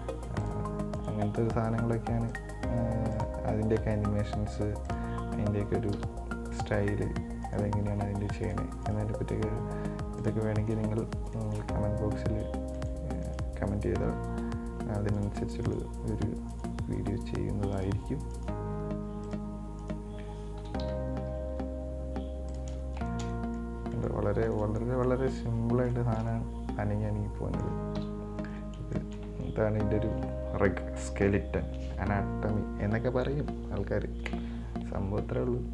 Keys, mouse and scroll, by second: 1.2 right click, 1.6 r, 3.4 right drag, 3.8 r, 5.4-6.2 scroll down 5, 6.2 KP_1, 7.1-7.7 scroll up 1, 7.7 right click, 8.1 r, 9.5 r, 11.2-11.6 scroll down 2, 11.6 shift+middle click, 12.0-13.0 scroll up 2, 13.0 right click, 13.5 right drag, 14.5 r, 15.9 right click, 16.8 right click, 17.2 r, 18.6 right click, 19.0 r, 20.1 right click, 20.8 KP_1, 21.1 KP_3, 21.7 r, 23.1 scroll down 3, 23.3-25.8 shift+middle drag, 25.8-26.2 scroll up 2, 26.2-28.2 shift+middle drag, 28.2 KP_1, 28.9-29.2 scroll down 3, 29.2-32.2 shift+middle drag.